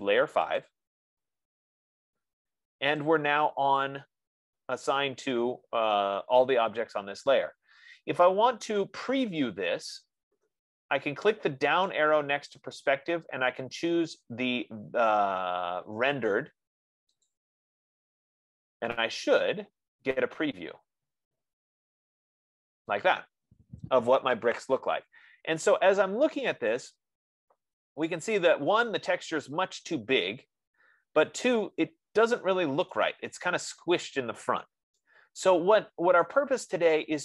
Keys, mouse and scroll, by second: 1.0 click, 4.3 click, 12.5-17.2 drag, 17.8-22.8 drag, 33.5 right click, 36.5 right click.